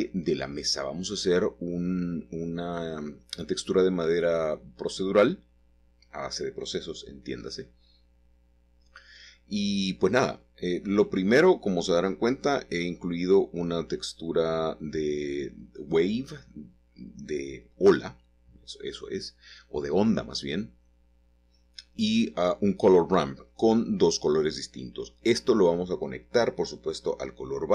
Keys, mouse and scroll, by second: 0.0 click, 1.7 click, 4.9 click, 5.7-7.1 scroll up 2, 7.1-8.9 drag, 9.7 click, 11.8-15.6 drag, 16.4-21.1 drag, 22.1-24.6 drag, 27.6-27.7 shift+middle drag.